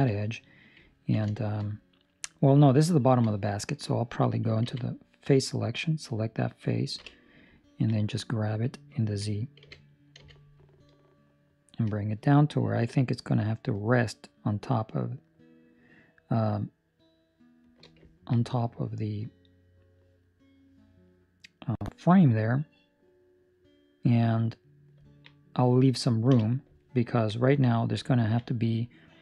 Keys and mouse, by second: 0.9 ctrl+middle click, 1.3 shift+middle click, 4.6 3, 4.7 right click, 6.9 KP_1, 7.5 ctrl+middle click, 9.5 g, 18.0 ctrl+middle click, 18.3 middle click, 19.4 middle click, 24.9 ctrl+middle click, 25.2 middle click, 26.2 KP_1, 26.7 ctrl+middle click, 28.0 ctrl+middle click.